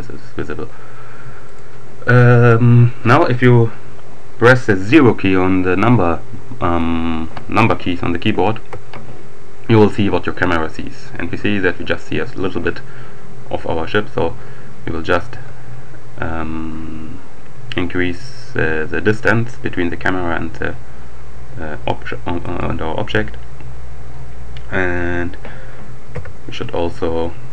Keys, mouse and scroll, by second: 1.4 right click, 5.2 KP_0, 13.5-14.0 scroll down 2, 14.2-14.8 scroll down 2, 15.2 g, 22.5 click, 26.1 KP_1.